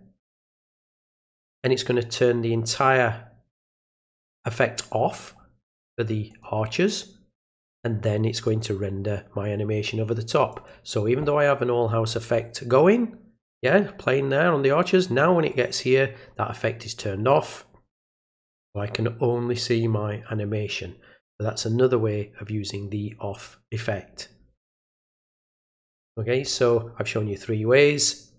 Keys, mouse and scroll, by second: 6.3 click, 8.5 click, 10.5 click.